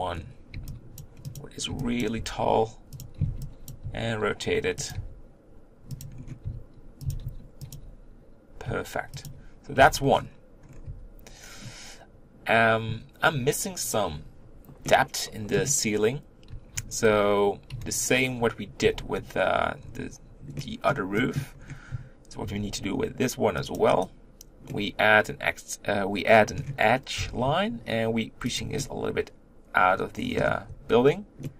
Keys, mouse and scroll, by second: 1.0 b, 1.2 click, 2.0 b, 2.2 g, 3.7 b, 5.0 g, 6.4 r, 7.0 s, 7.8 g, 9.8 Tab, 10.1-10.6 scroll down 5, 10.6 scroll up 3, 10.9 Tab, 11.5-14.8 scroll up 2, 14.8-17.1 middle drag, 17.1 z, 18.8 1, 19.8-20.6 scroll down 2, 20.6-21.6 middle drag, 21.6-22.4 scroll up 1, 22.4 ctrl+r, 24.7-27.2 middle drag, 27.2 g, 28.8-30.7 middle drag, 30.7 Tab, 31.4-31.5 middle drag.